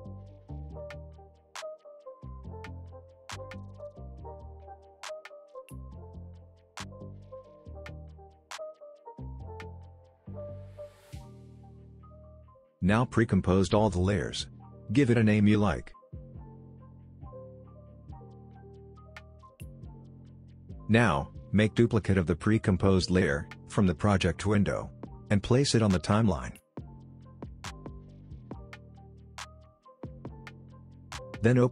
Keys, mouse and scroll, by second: 0.3-1.3 shift+click, 1.8-2.4 click, 3.1 space, 6.2 space, 6.8-7.5 scroll down 1, 7.5 space, 7.7 click, 8.0 space, 8.8 click, 9.3 space, 12.4-13.7 click, 13.4 right click, 14.7 click, 16.0-17.9 typing, 18.4 Return, 19.6-20.5 drag, 24.0 ctrl+d, 25.7-28.9 drag.